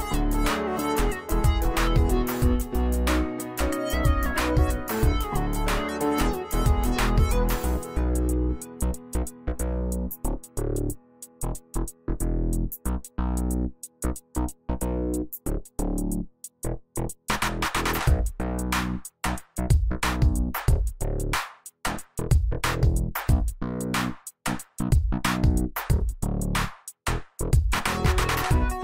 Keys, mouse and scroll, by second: 3.8-7.2 drag, 14.1 z, 14.6 alt+click, 15.1 space, 15.6-16.0 click, 15.7 space, 16.6-19.2 drag, 20.0 right click, 21.2 click, 24.2 x.